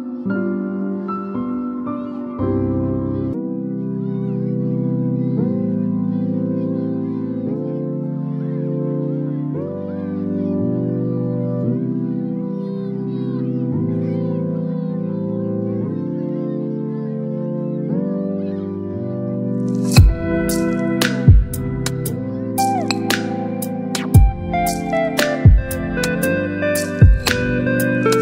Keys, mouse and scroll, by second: 0.6 click, 2.2-3.7 typing, 5.0-5.4 typing, 7.0 click, 8.3 v, 8.6 ctrl+t, 10.3-12.7 shift+drag, 14.6-16.3 alt+drag.